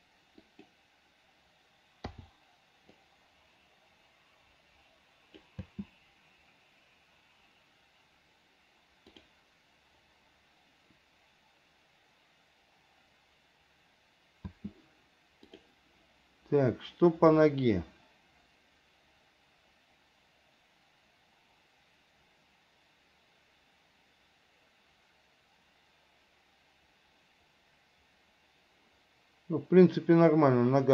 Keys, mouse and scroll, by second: 2.3 i, 3.2-5.7 drag, 5.9 space, 9.4 click, 14.7 space, 15.7 click, 17.6-30.9 drag.